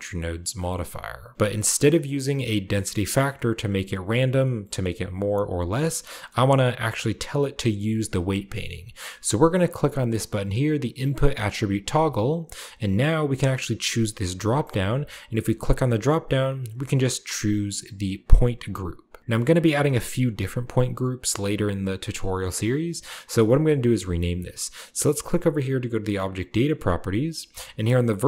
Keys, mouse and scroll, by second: 2.0-5.6 drag, 6.2 middle click, 6.2-7.7 scroll up 1, 7.0 middle click, 11.7 click, 15.4 click, 18.5 click, 19.0 drag, 26.0 click.